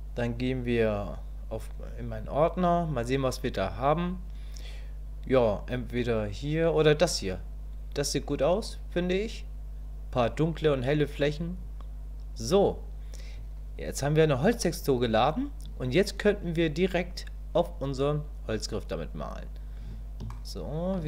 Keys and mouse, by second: 20.3 shift+middle click.